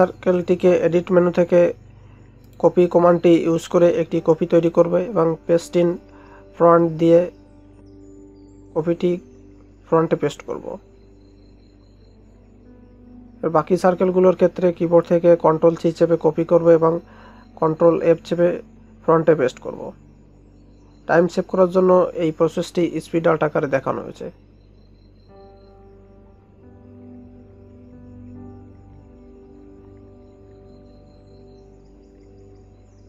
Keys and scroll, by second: 13.3 ctrl+c, 13.6 ctrl+f, 17.0 ctrl+c, 17.2 ctrl+f, 18.5 ctrl+c, 18.7 ctrl+f, 19.8 ctrl+c, 20.2 ctrl+f, 21.7 ctrl+c, 22.0 ctrl+f, 23.6 ctrl+c, 23.9 ctrl+f, 25.3 ctrl+c, 25.6 ctrl+f, 27.2 ctrl+c, 27.6 ctrl+f, 29.1 ctrl+c, 29.5 ctrl+f, 30.8 ctrl+c, 31.2 ctrl+f.